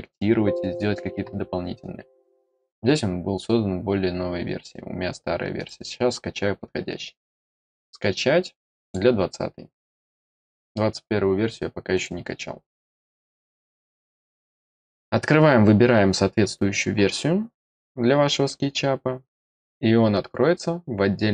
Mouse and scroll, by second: 5.5 click, 7.1 click, 8.7 click, 11.9 click.